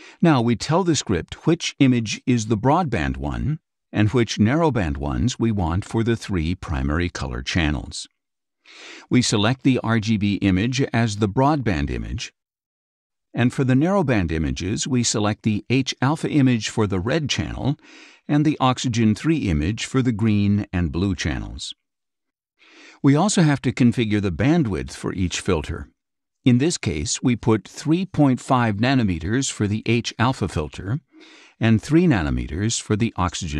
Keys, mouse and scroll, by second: 11.0 click, 15.2 click, 18.5 click, 20.0 click, 21.3 click, 22.6 click, 25.2 click, 29.0 KP_3, 29.4 KP_Decimal, 29.6 KP_5, 31.8 click.